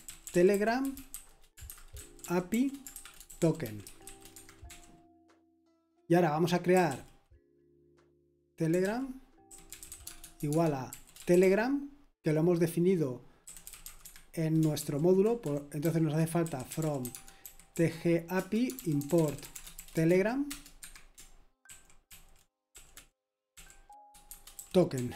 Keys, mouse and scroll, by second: 0.0-5.2 typing, 4.3 Escape, 6.5-7.3 typing, 8.4-11.9 typing, 13.3-20.6 typing, 14.8 ctrl+u, 18.3 Return, 20.8 Escape, 21.6 ctrl+d, 22.0-25.1 typing.